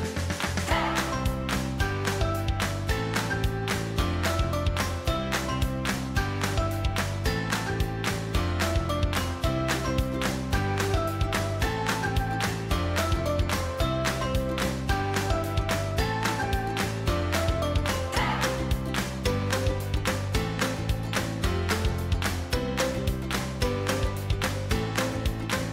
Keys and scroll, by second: 0.8 Delete.